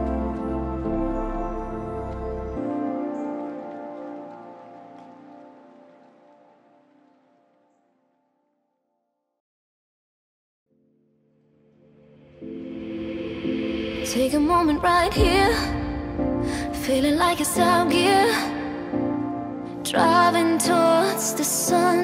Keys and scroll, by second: 18.6 ctrl+g, 19.3 ctrl+alt+shift+e.